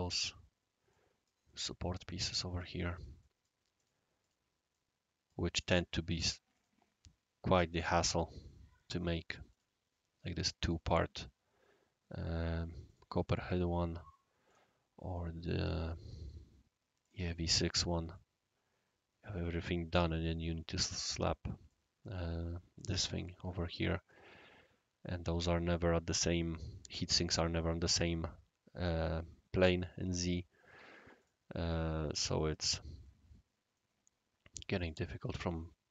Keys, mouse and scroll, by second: 0.1 click, 0.9 right click, 1.5 middle click, 2.0 click, 2.5 click, 2.9 click, 3.2 right click, 3.7 click, 4.2 click, 4.7 right click, 5.5 click, 6.5 click, 7.8 click, 8.1-9.3 right drag, 9.5 click, 10.6 click, 12.3 click, 12.8 click, 14.4 click, 15.1 right click, 17.0 click, 17.5-17.9 middle drag, 18.1-19.7 right drag, 19.9 click, 21.7-24.1 right drag, 24.7 scroll down 1, 24.7-25.7 scroll up 1, 25.7 click, 31.2 click, 33.7-34.9 right drag.